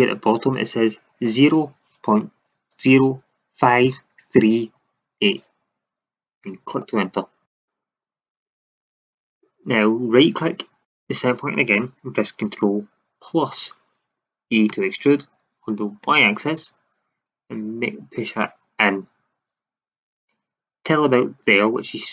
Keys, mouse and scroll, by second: 6.7-9.6 drag, 10.8-13.2 right drag, 13.2 ctrl+KP_Add, 14.6 e.